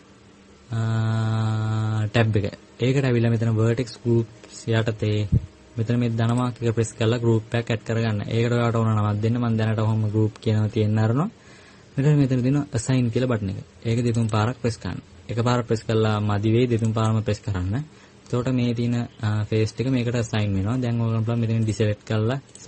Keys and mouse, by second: 0.3-5.3 drag, 15.3-22.6 drag.